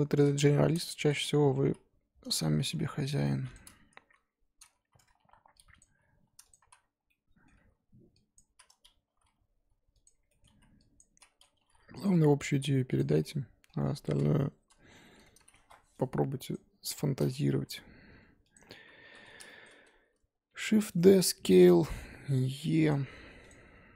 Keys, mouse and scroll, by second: 0.2 KP_3, 0.6-1.1 scroll up 2, 1.1 z, 1.5 s, 4.0 KP_1, 5.2-9.1 typing, 5.8 click, 7.0 scroll down 1, 7.1 middle click, 8.3 click, 10.3 middle click, 10.5 z, 11.0 click, 11.1 z, 11.2 middle click, 11.6 g, 12.1 middle click, 12.5 g, 13.2-14.6 middle drag, 14.6 KP_1, 15.4 z, 16.5 click, 17.6 g, 18.7-19.0 scroll down 3, 19.0 3, 19.4 shift+middle click, 19.7-20.5 scroll up 2, 20.5 shift+d, 21.1 s, 21.8 e, 23.0-23.9 typing.